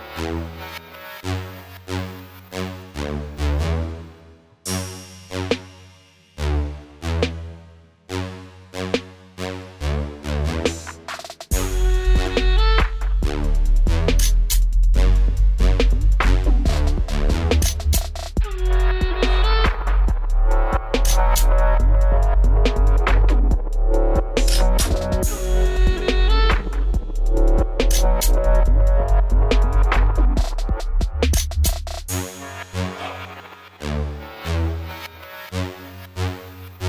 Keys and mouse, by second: 1.8 w, 3.3 w, 4.9 right click, 5.2 w, 6.5 right click, 7.1 w, 8.1 ctrl+z, 8.4 w, 10.1 w, 11.5 ctrl+s, 12.6 ctrl+z, 13.0 w, 13.9 w, 14.7 w, 17.5 w, 18.5 ctrl+z, 18.9 w, 20.3 middle click, 20.8-22.0 right drag, 22.0 w, 23.3 w, 24.6 click, 24.8 w, 26.2-28.9 middle drag, 28.9 w, 33.9 b, 34.7 b, 35.3 b, 36.7 b.